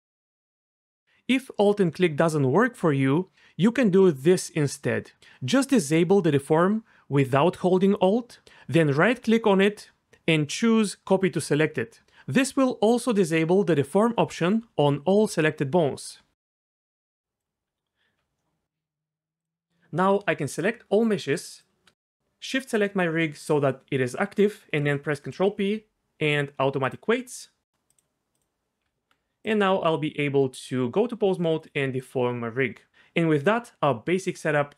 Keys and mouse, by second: 0.6 shift+click, 0.9 shift+click, 6.1-12.2 drag, 17.7 Tab, 19.4 click, 22.5 shift+click, 25.7 ctrl+p, 27.9 click, 28.8 Tab, 29.7 r, 31.6 click, 32.2 r.